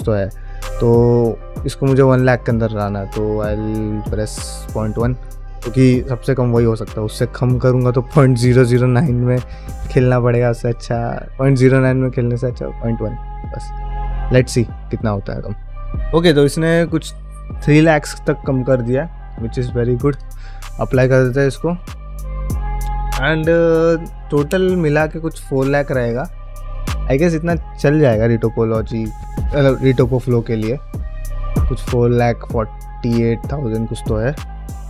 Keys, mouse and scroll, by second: 2.6 click, 19.4-34.8 drag.